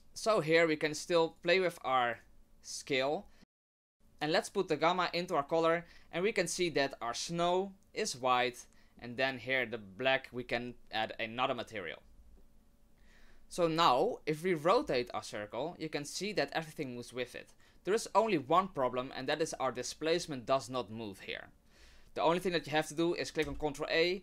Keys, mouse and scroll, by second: 1.3 click, 2.1 click, 3.2 middle click, 3.5 scroll down 4, 3.6 middle click, 3.7 middle click, 3.9 click, 4.9 click, 7.4 middle click, 12.2 scroll down 2, 12.3 scroll up 1, 12.4 middle click, 12.9 right click, 14.7 r, 23.4 ctrl+a.